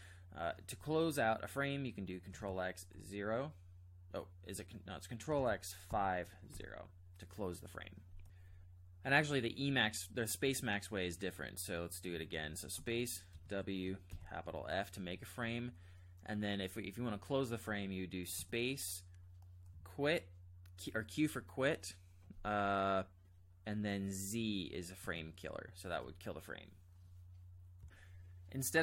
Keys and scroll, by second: 2.4 ctrl+x, 2.9 0, 5.3 ctrl+x, 5.9 5, 6.6 0, 12.8 space, 13.3 w, 14.1 shift+f, 18.4 space, 19.7 q, 25.1 z.